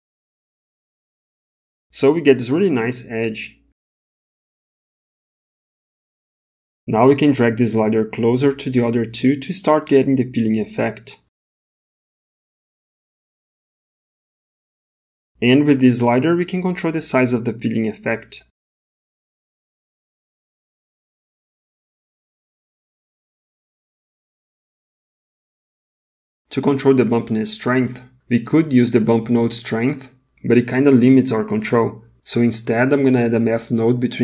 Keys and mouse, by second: 0.3 middle click, 8.0-11.7 drag, 12.1 middle click, 16.1 click, 22.2-23.6 middle drag, 25.6 click, 27.5 middle click, 29.2-32.7 drag.